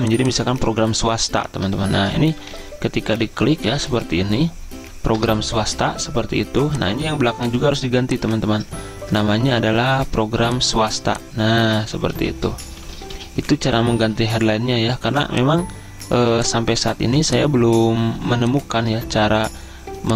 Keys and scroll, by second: 1.9-5.2 typing, 12.2-14.6 typing.